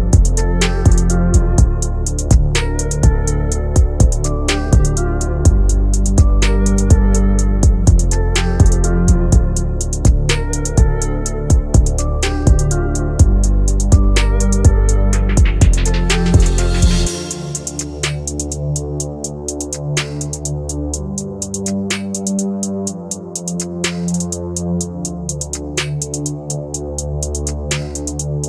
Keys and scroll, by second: 0.1 Escape, 11.7 shift+Page_Up, 25.8 F3.